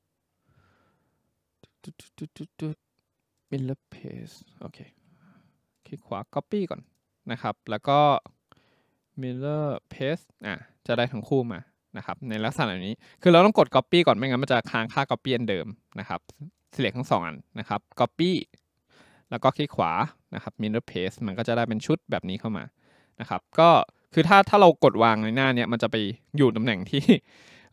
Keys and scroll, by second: 5.0 Escape.